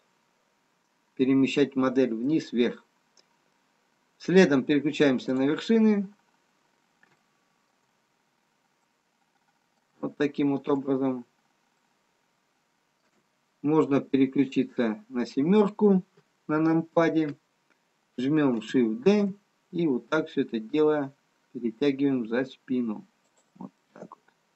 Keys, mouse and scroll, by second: 3.8 middle click, 3.8-4.1 scroll down 1, 6.5 click, 7.5 shift+middle click, 8.8 middle click, 8.8 scroll up 2, 11.0 middle click, 11.7 middle click, 11.7-12.9 scroll down 2, 14.2 KP_7, 23.9 middle click.